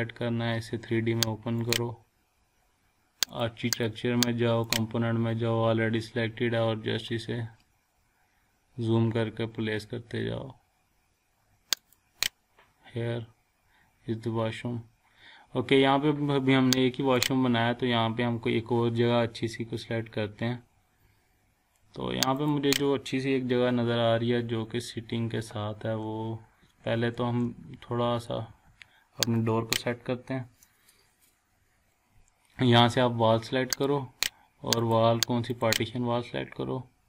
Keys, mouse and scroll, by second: 1.6 click, 7.0 scroll up 1, 11.7 click, 11.8 click, 12.4 scroll down 1, 14.5 scroll up 1, 17.3 click, 17.6 scroll down 1, 18.0 scroll up 1, 18.8 scroll down 1, 19.3-19.9 scroll up 1, 20.9 scroll down 1, 21.2 scroll up 1, 22.4 click, 25.4 Left, 29.3 click, 31.2 scroll down 1, 33.7 click, 36.9 scroll up 1.